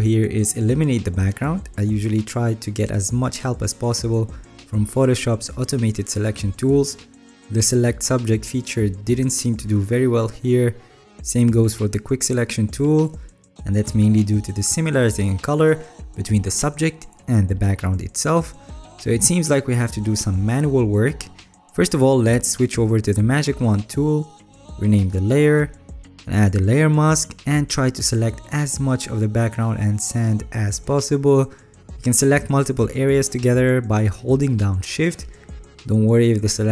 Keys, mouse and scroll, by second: 2.6-3.5 alt+scroll, 3.5-5.1 scroll up 8, 5.1-6.0 scroll up 1, 6.0 alt+scroll, 15.7-17.5 alt+drag, 17.7-19.5 alt+right drag, 20.4 alt+click, 21.0 ctrl+d.